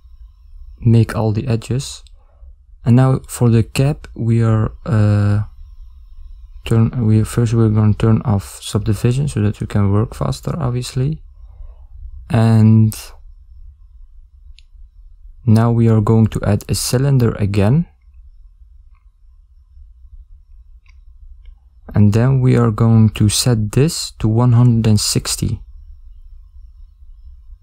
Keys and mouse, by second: 0.5 ctrl+middle click, 12.0 ctrl+m, 12.0 ctrl+a, 13.0 ctrl+middle click, 14.6 shift+a, 21.5 click, 24.0 click.